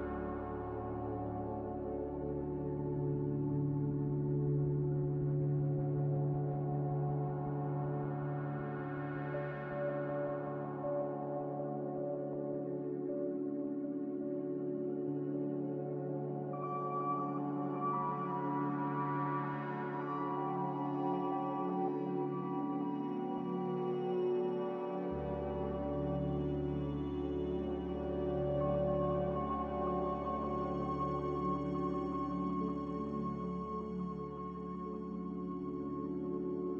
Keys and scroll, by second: 7.1 c, 14.8 a, 15.9-16.8 typing.